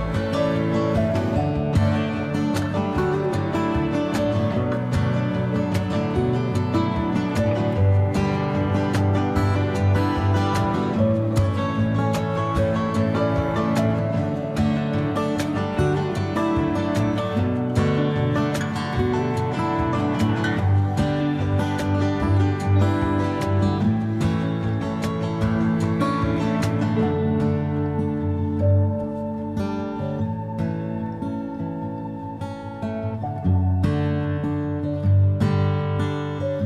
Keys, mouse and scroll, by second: 0.4 g, 2.4 g, 7.5 g, 9.7 g, 14.6 click, 14.9 g, 17.7 click, 18.1 g, 21.8 g, 23.9 click, 24.2 g, 28.1-30.7 shift+middle drag, 30.1 g, 31.5-33.1 middle drag, 35.0-36.6 middle drag, 35.0 a, 35.2 a.